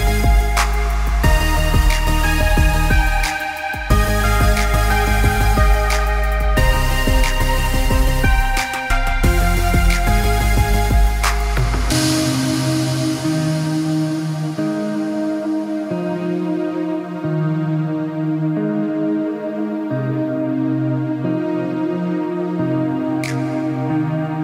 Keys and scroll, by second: 7.9 b.